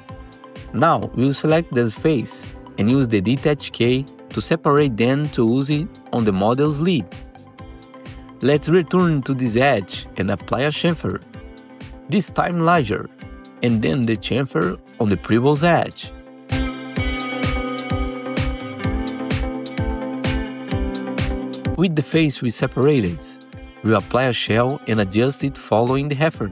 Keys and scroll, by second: 4.8 4, 11.0 2, 12.1 ctrl+shift+c, 16.4 ctrl+shift+c, 20.6 2, 20.8 F4, 21.1 F4, 21.5 F4, 23.3 alt+q, 25.5 f, 25.7 F3.